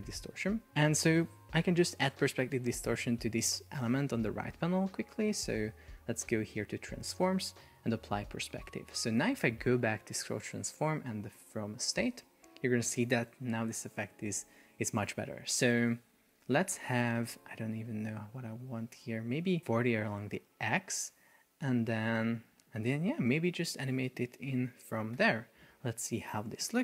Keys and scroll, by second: 16.1 shift+Down, 17.6 shift+Up, 25.3 super+p.